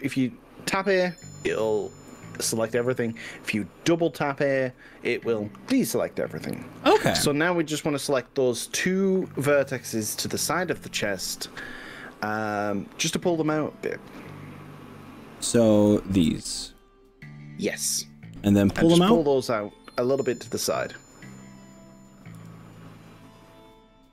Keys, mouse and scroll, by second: 2.1 a, 2.9 a, 3.1 a, 15.1 click, 15.9 click, 16.9 click, 22.5 g.